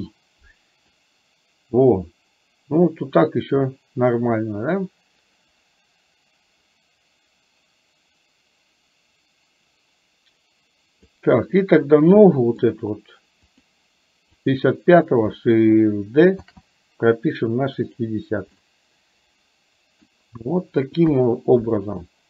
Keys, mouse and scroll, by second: 1.0-11.2 drag, 12.3 middle click, 13.5 click, 14.4 click, 16.5 shift+d, 18.7-20.2 middle drag, 21.2 KP_1.